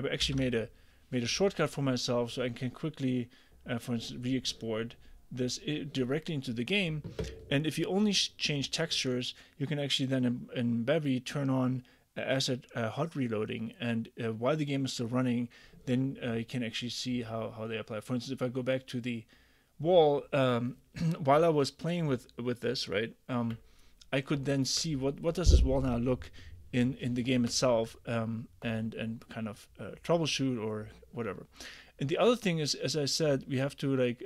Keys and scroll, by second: 0.3 super+e.